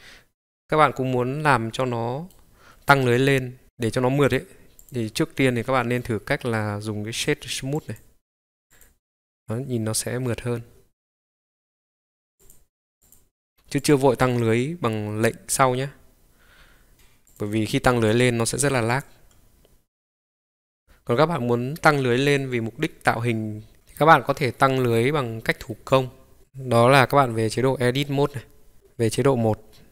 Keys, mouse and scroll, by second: 0.4-2.4 middle drag, 4.2 click, 4.8 click, 5.8-8.7 right drag, 8.7 click, 12.4 click, 17.2 click, 18.9-20.2 drag, 20.2-22.6 middle drag, 23.1-23.8 middle drag, 23.8 click, 24.3 click, 24.5 scroll up 3, 25.3 scroll down 1, 25.3-25.7 scroll down 1, 25.7 middle click, 27.8 Tab.